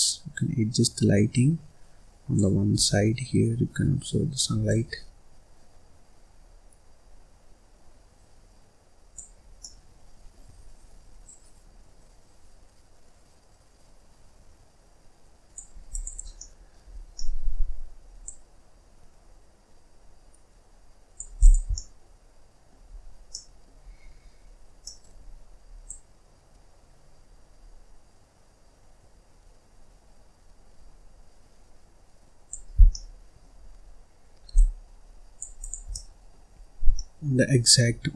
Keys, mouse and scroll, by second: 2.8-4.6 middle drag, 4.6 click, 9.5-11.1 middle drag, 11.1 click, 15.8 click, 16.1 scroll down 2, 16.3 middle click, 16.8 scroll down 1, 17.0-18.1 middle drag, 18.1 click, 21.3 click, 21.7-22.8 middle drag, 22.8-23.2 scroll up 1, 23.2 middle click, 23.8-24.2 scroll down 1, 24.2-24.7 scroll up 2, 24.7 middle click, 25.7 click, 32.7 scroll down 2, 32.8 middle click, 33.7-34.4 scroll up 1, 34.4 click, 35.5 click, 35.8 middle click, 36.5-36.8 scroll up 1, 36.8 scroll down 2, 36.9 middle click, 37.4-37.8 scroll down 1, 37.8-38.1 scroll up 1.